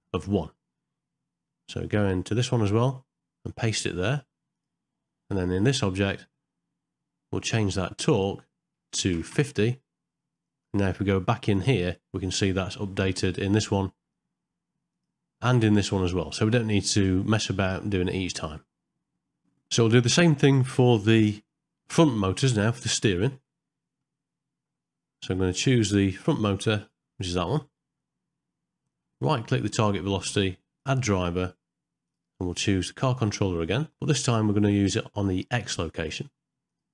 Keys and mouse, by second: 3.7 right click, 6.1 click, 8.3-9.4 drag, 23.1 shift+middle click, 23.5 middle click, 26.8 click, 29.0 middle click, 29.6-36.9 right drag.